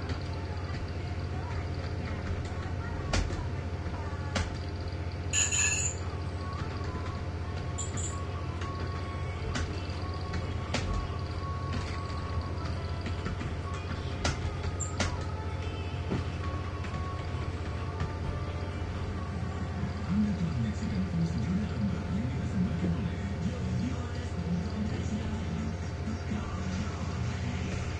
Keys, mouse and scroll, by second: 0.0-4.5 typing, 6.5-18.6 typing, 20.0 click, 21.4 shift+click, 22.2 shift+click, 23.7 click, 24.7 click, 27.8 shift+\.